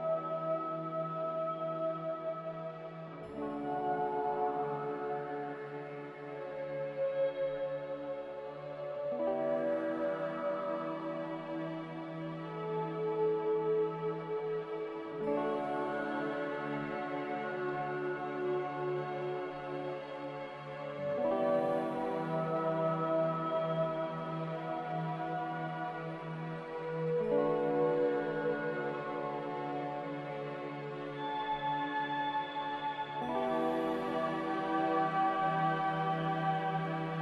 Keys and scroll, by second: 27.7-28.8 typing, 30.4-31.3 typing, 31.3 Return.